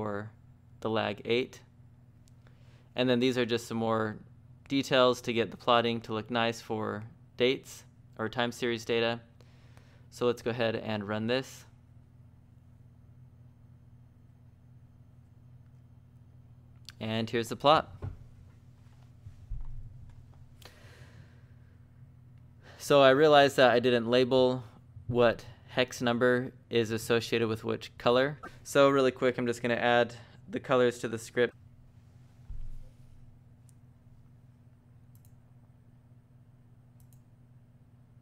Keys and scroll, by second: 0.9 j, 1.2 j, 5.8 j, 7.0 j, 7.6 j, 9.7 j, 9.9 j, 10.2 j, 11.8-15.1 typing, 32.5 Escape, 32.7 Escape, 33.6-36.5 typing, 37.7-38.2 typing.